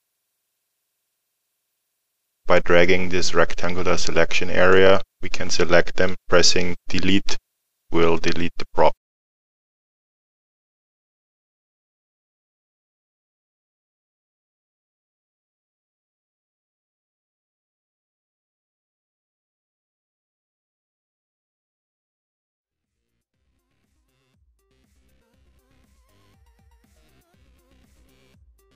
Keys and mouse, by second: 2.1 click, 7.3 Delete, 8.2 middle click, 9.0 click, 9.2 middle click, 9.6 click, 9.7 Delete, 9.8 click, 9.9 Delete, 9.9 middle click, 10.0 click, 10.2 middle click, 10.6 click, 10.9 Delete, 11.0 click, 11.2 Delete, 11.3 middle click, 11.8 click, 11.9 Delete, 11.9 middle click, 12.0 click, 12.1 Delete, 12.3 middle click, 12.6 click, 12.7 Delete, 12.8 click, 12.9 Delete, 13.0 click, 13.1 Delete, 13.2 middle click, 13.5 click, 13.6 Delete, 13.7 click, 13.8 Delete, 13.9 click, 13.9 Delete, 14.0 click, 14.1 Delete, 14.2 click, 14.2 Delete, 14.3 middle click, 15.0 click, 15.1 Delete, 15.2 click, 15.3 middle click, 15.4 click, 15.6 Delete, 15.7 click, 15.8 Delete, 16.6 click, 16.7 Delete, 16.8 click, 16.8 Delete, 16.9 click, 17.0 Delete, 17.1 click, 17.2 middle click, 17.5 click, 17.6 Delete, 17.7 click, 17.8 Delete, 17.9 click, 18.0 Delete, 18.1 middle click, 18.9 middle click, 19.6 click, 19.8 Delete, 19.9 middle click, 20.1 click, 20.1 Delete, 20.3 click, 20.3 Delete, 20.4 middle click, 20.6 click, 20.8 Delete, 20.9 click, 21.0 Delete, 21.1 click, 21.2 middle click, 21.4 click, 21.5 Delete, 21.6 click, 21.7 Delete, 21.8 click, 21.9 Delete, 22.0 click, 22.1 middle click, 22.2 click, 22.3 middle click, 22.7 click, 22.8 Delete, 22.9 click, 23.0 Delete, 23.1 click, 23.2 Delete, 23.3 click, 23.5 Delete, 23.5 middle click, 23.7 click, 23.8 Delete, 24.0 click, 24.1 Delete, 24.2 click, 24.3 Delete, 24.4 click, 24.4 Delete, 24.5 middle click, 24.9 click, 25.1 Delete, 25.2 click, 25.2 Delete, 25.3 click, 25.4 Delete, 25.4 middle click, 25.9 click, 26.0 Delete, 26.1 click, 26.1 Delete, 26.3 middle click, 26.5 click, 26.8 Delete, 26.9 middle click, 27.2 click, 27.6 Delete, 27.8 click, 28.2 middle click, 28.7 click.